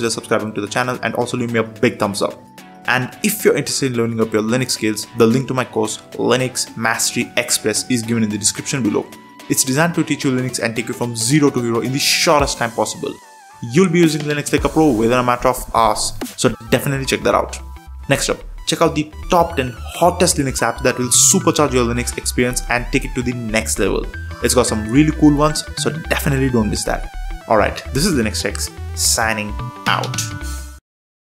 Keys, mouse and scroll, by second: 0.1 Return, 0.7 Down, 1.1 Return.